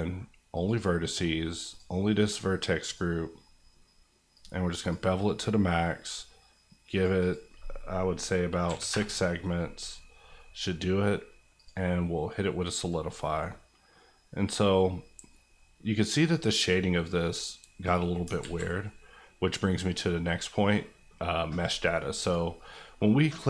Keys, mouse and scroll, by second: 7.2 click, 8.6 KP_6, 8.9 KP_Enter, 11.5 click, 18.4 alt+z, 18.8 middle click, 22.2-23.4 drag.